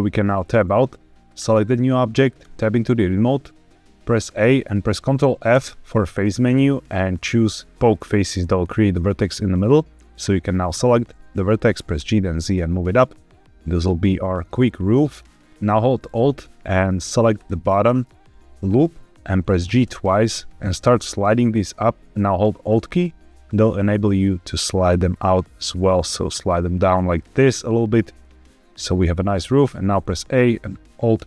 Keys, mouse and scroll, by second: 0.0 Tab, 1.2 click, 2.3 Tab, 4.1 a, 5.4 ctrl+f, 10.0 click, 11.7 g, 11.9 z, 15.0 click, 17.3 alt+click, 19.5 g, 19.7 g, 27.0 alt+click, 27.5-28.8 middle drag, 29.1-29.5 scroll up 1, 29.5 a, 31.0 alt+e.